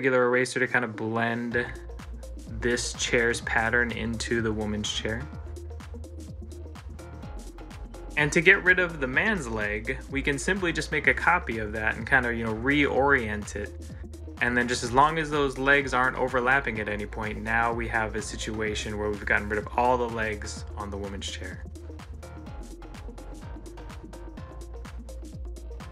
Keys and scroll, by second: 1.0 ctrl+s, 14.8 ctrl+s, 20.9 ctrl+s.